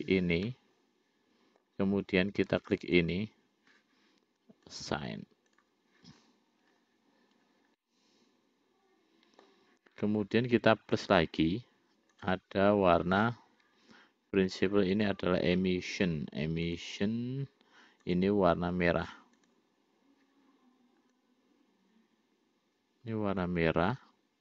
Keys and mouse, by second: 0.8-2.0 middle drag, 3.1 shift+click, 5.1 click, 8.2-9.9 middle drag, 11.4 click, 12.6 click, 15.4-18.3 drag, 18.5 click.